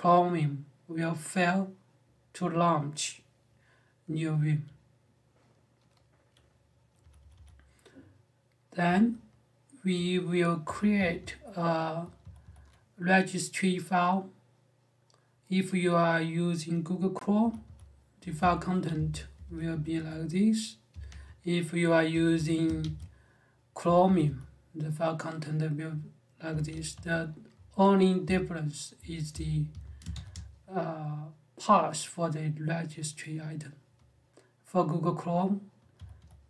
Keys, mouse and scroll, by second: 6.8-7.1 typing, 8.4-12.9 typing, 17.2 j, 17.4 j, 18.5-22.6 typing, 20.7 Escape, 23.6-24.0 typing, 26.2 Escape, 26.7-30.1 typing, 35.7-36.4 typing.